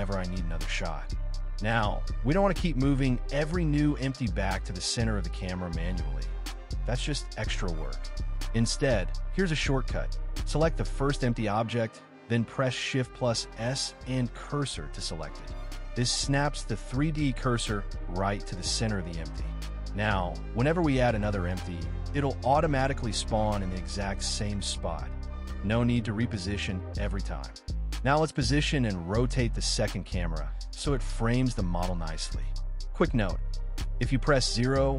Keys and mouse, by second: 0.1-0.5 shift+drag, 1.6 click, 2.1 middle click, 3.4 KP_1, 4.5 shift+a, 10.5 shift+s, 13.8-14.2 middle drag, 14.7-15.3 middle drag, 16.9-17.3 drag, 17.3 middle click, 18.8 click, 23.7 r, 23.9 z, 24.8-25.4 drag, 25.4 KP_0, 27.0 middle click, 28.4-30.2 drag, 31.7 r, 32.1 z.